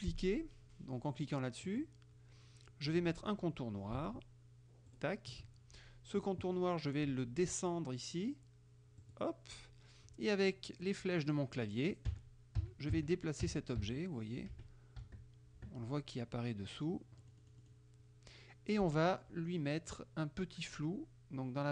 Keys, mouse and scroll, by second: 1.7 click, 5.0 shift+click, 9.1 click, 12.2 Right, 13.5 Down, 14.6 Right, 15.1 Down, 17.3 middle click.